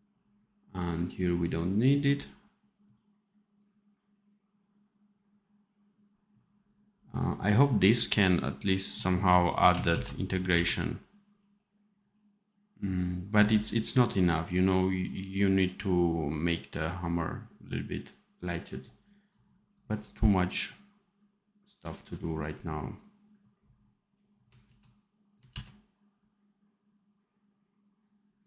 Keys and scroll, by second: 9.8 ctrl+z, 10.4 v, 24.5 ctrl+c, 25.4 ctrl+v.